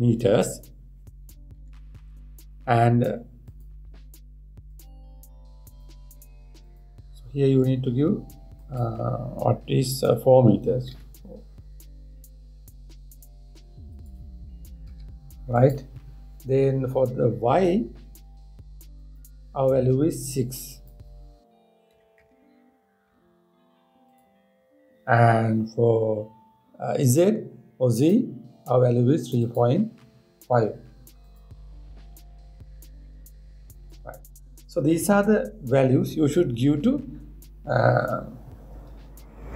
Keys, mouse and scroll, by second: 5.4-6.5 drag, 7.3-10.4 drag, 19.6-22.7 drag, 22.9 BackSpace, 28.7-31.8 drag.